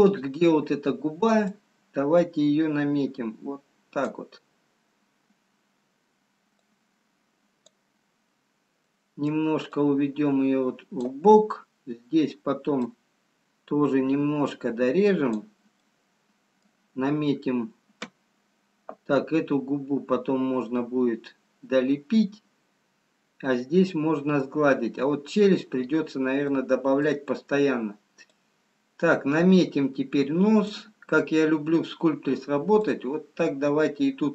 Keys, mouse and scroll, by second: 1.5 click, 7.3 click, 10.2 middle click, 10.2-10.5 scroll down 1, 13.1 click, 15.7 scroll down 1, 16.8 middle click, 20.5 scroll up 1, 23.9 scroll down 1, 25.8-26.3 scroll up 1, 26.5 middle click, 28.7 click, 32.9 click.